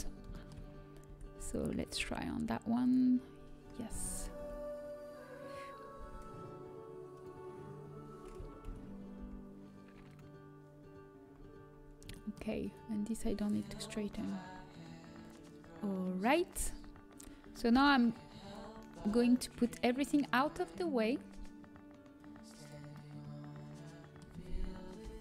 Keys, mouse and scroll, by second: 3.1-5.1 drag, 3.1 a, 3.1 l, 4.7 a, 11.7 click, 12.0-16.4 middle drag, 16.4 a, 16.9-19.4 middle drag, 18.7 b, 19.4 g, 22.0 middle click, 22.1-24.0 drag, 24.9 alt+h.